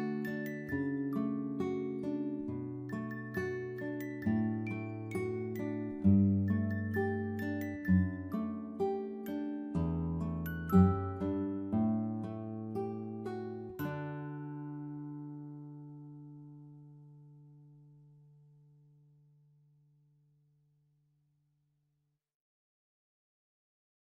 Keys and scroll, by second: 9.3-11.5 typing, 23.1 Up, 23.5-24.0 typing.